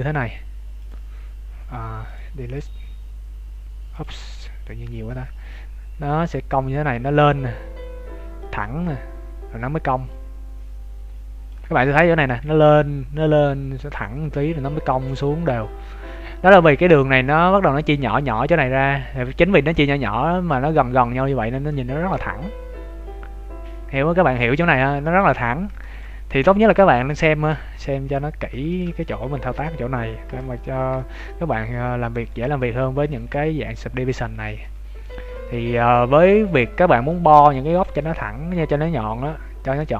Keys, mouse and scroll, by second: 0.8 click, 5.9-6.4 d, 6.4 click, 17.2-18.7 scroll up 9, 18.7 scroll up 1, 22.0-22.9 scroll down 9, 24.2 click, 24.7 scroll down 1, 25.0 shift+middle click, 27.9 scroll up 3, 28.4 scroll down 1, 28.6 shift+middle click, 29.0 middle click, 29.7 scroll down 1, 30.2 n, 30.7 scroll up 1, 30.9 shift+middle click, 31.5 middle click, 32.5-33.0 scroll up 1, 33.0 g, 34.6 middle click, 35.2 scroll down 1, 35.9 scroll down 1, 36.5 scroll up 1, 37.0 middle click, 37.0 scroll up 1, 39.8 middle click.